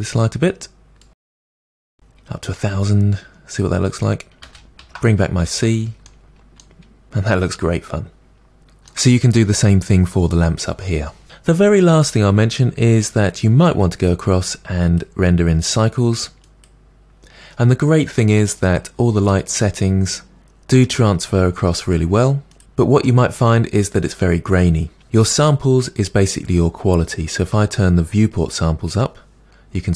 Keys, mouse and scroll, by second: 1.9 0, 4.1-4.4 scroll down 2, 4.4 space, 4.7 space, 4.8 alt+h, 5.5 space, 6.1-11.2 middle drag, 11.2 space, 16.6-17.8 drag, 22.6-23.1 scroll up 3, 23.1-26.8 middle drag, 26.8-29.9 drag.